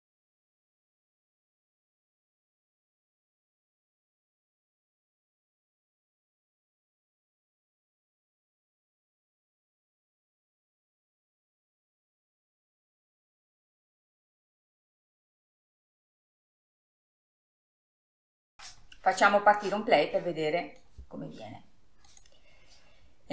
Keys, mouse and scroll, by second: 18.6-19.3 middle drag, 19.3 scroll down 3, 19.5-20.9 middle drag, 20.9 scroll up 2, 21.8-23.3 drag.